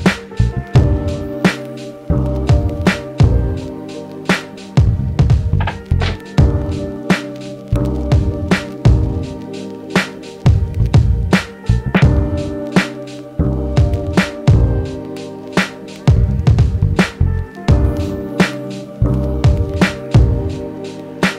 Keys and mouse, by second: 2.4 shift+Tab, 3.5 ctrl+Tab, 7.6 shift+a, 9.6-21.3 drag, 15.3 r, 16.0 ctrl+z, 20.6 e.